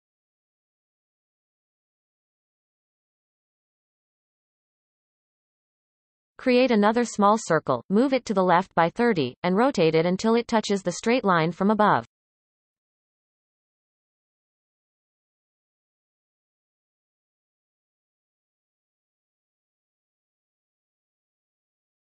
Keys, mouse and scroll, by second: 3.9-5.3 scroll down 14, 5.3-5.7 shift+middle drag, 5.7-7.2 scroll down 4, 7.2 shift+a, 9.1 g, 11.1 shift+middle click, 11.6 scroll up 1, 12.1 shift+middle click, 12.8 r, 17.1 shift+middle click, 17.5-18.1 scroll up 6, 18.1-18.6 shift+middle drag, 18.7-19.7 scroll up 5, 18.9 middle click, 19.7 r.